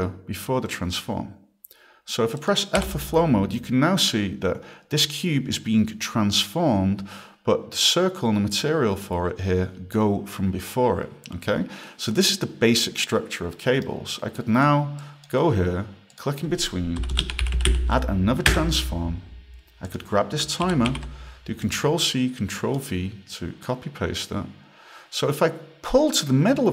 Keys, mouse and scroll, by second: 2.4 click, 13.5 right click, 14.4 click, 15.0 click, 16.1 click, 17.0-18.2 typing, 18.5 Return, 19.9 click, 20.7 ctrl+c, 20.9 ctrl+v, 21.6 click, 22.5-23.2 typing, 23.6 click.